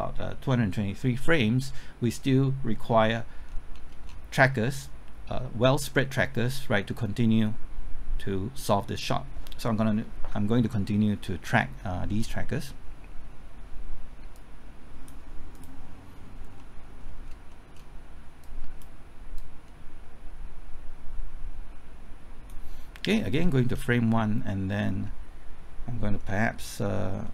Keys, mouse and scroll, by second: 3.4 scroll down 1, 4.3-5.9 scroll up 1, 14.3 click, 16.6 middle click, 17.2-17.5 scroll up 1, 17.5 middle click, 18.4-22.6 drag, 23.2 middle click, 23.7-24.0 scroll up 1, 24.0 middle click, 24.9-26.2 scroll down 1, 26.2 middle click, 26.8-27.2 scroll up 1, 27.2 middle click.